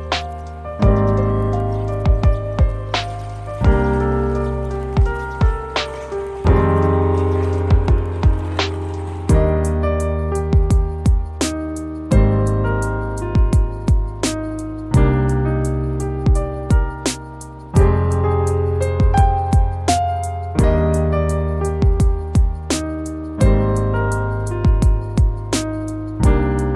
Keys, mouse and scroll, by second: 0.4 scroll up 1, 0.6 scroll down 1, 3.6 scroll down 1, 5.2 scroll down 1, 6.1 middle click, 6.6 scroll up 1, 7.2 middle click, 9.4 shift+a, 16.9 shift+a, 17.9 scroll down 1, 18.6 scroll up 1, 20.0-20.6 scroll down 2, 20.4 middle click, 20.9 middle click, 24.8 middle click, 26.6 shift+a.